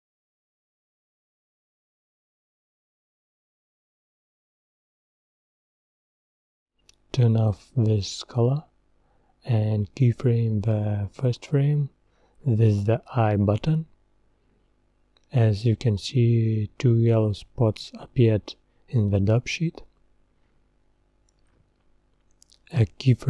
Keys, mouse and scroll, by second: 3.6 click, 4.2-8.4 drag, 11.0 scroll down 2, 11.8 scroll down 1, 12.1 KP_0, 18.7 i, 22.8-23.2 drag.